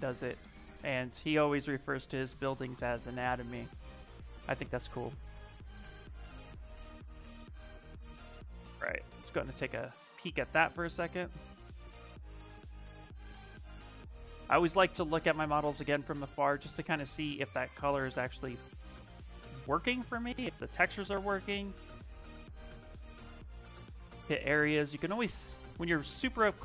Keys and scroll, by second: 18.9 c.